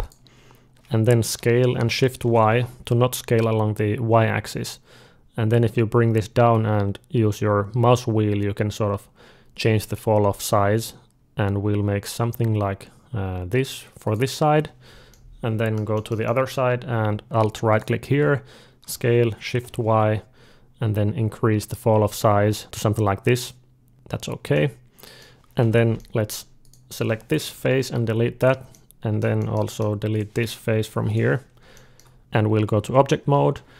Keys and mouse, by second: 1.1 s, 15.0-17.2 middle drag, 17.6-19.6 drag, 18.7 s, 24.4 middle click, 25.4 3, 25.8 middle click, 26.5-28.5 drag, 27.3 Delete, 28.6-30.0 middle drag, 30.0-32.2 drag, 30.7 Delete, 32.2 Tab, 32.5 Tab.